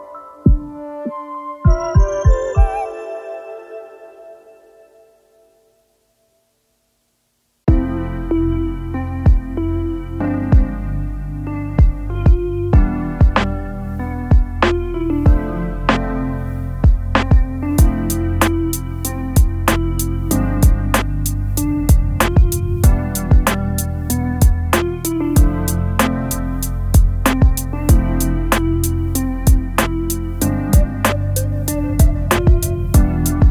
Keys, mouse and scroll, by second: 0.5 ctrl+a, 3.8-4.8 typing, 18.5 9, 19.0 1, 19.5 Return, 21.7-22.3 alt+scroll down 3, 23.2-23.6 alt+scroll down 1, 23.6-24.6 space, 25.6 shift+click, 26.7 ctrl+z, 30.6 double click, 30.8 double click.